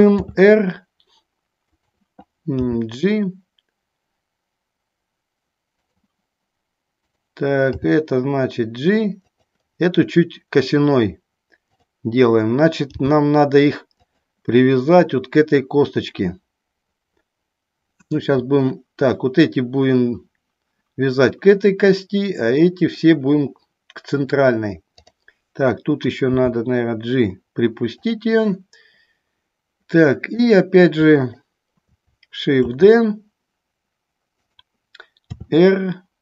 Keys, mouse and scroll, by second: 0.3 r, 2.7 g, 7.8 g, 12.9 g, 14.2 click, 26.5 g, 28.2 click, 31.4 shift+click, 32.8 shift+d, 34.7 click, 35.4 r.